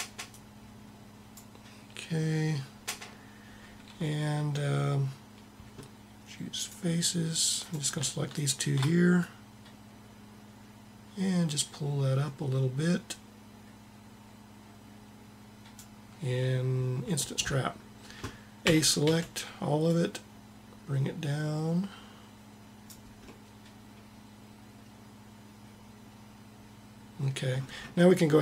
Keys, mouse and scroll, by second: 0.3-2.1 drag, 6.6-11.1 drag, 18.7 a, 19.0 a, 19.8-21.7 drag.